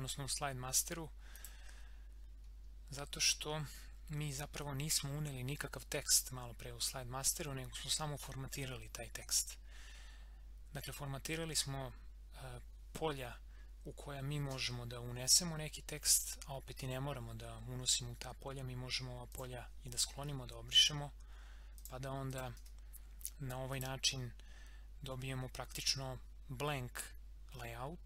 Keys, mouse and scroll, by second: 1.4 click, 2.4 scroll down 1, 19.3 click, 21.7 click.